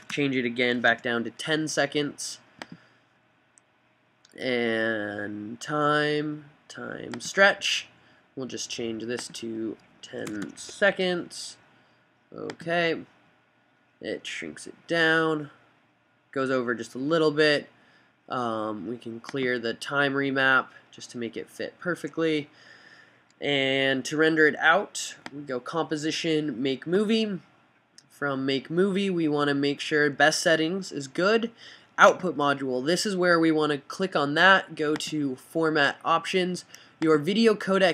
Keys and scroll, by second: 0.2 fn+BackSpace, 0.7-1.6 typing, 3.3-4.0 typing, 10.1 fn+Right, 10.5-11.1 typing.